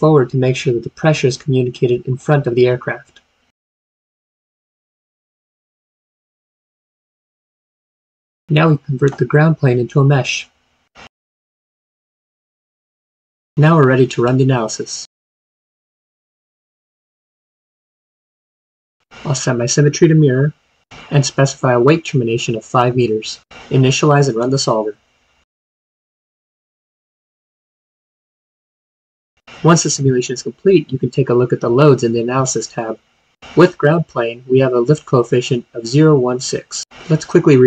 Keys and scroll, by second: 0.8-2.7 typing, 20.8 typing.